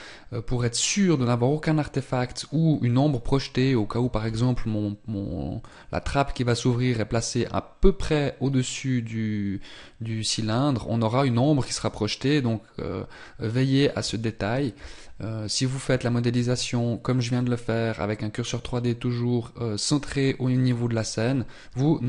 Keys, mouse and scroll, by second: 5.8 click, 14.7 ctrl+z.